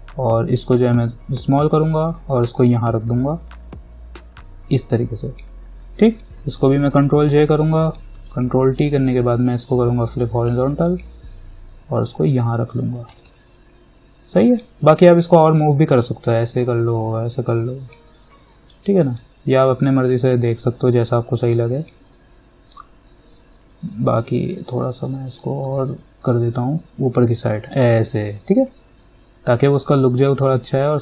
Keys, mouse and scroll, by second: 0.7-3.8 alt+drag, 3.8-5.8 alt+drag, 7.2 ctrl+j, 8.4 ctrl+t, 8.8 click, 9.7 right click, 10.7-13.3 drag, 11.6-13.3 drag, 15.1 ctrl+t, 15.5-21.7 drag, 25.3 ctrl+j, 25.8 ctrl+t, 26.5-30.9 drag, 30.9-31.0 alt+drag.